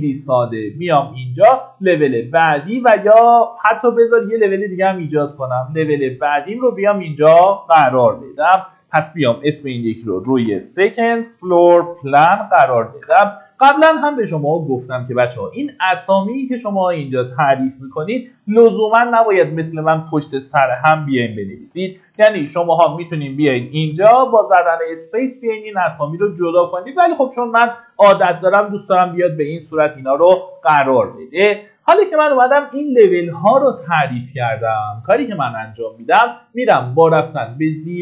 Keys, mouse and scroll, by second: 0.1 click, 1.5 Escape, 4.0 click, 4.8 middle click, 5.4 Escape, 6.5 click, 8.1-12.8 typing, 12.9 Return, 14.4 click, 18.4 KP_0, 20.2-24.2 typing, 24.4 Return, 26.4 click, 29.0 middle click, 29.5-30.6 scroll down 1, 31.7 middle click, 32.4 click.